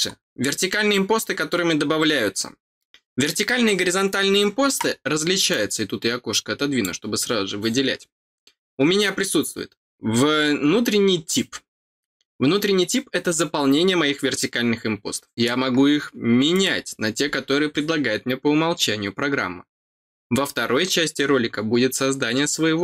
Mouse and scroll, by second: 5.4-6.8 drag, 16.5 click.